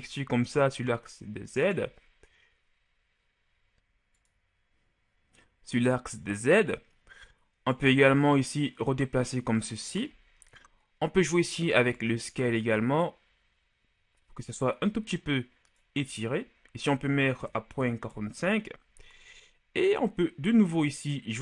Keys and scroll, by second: 17.3 KP_Decimal, 17.7 KP_8, 17.9 KP_5, 18.2 Return.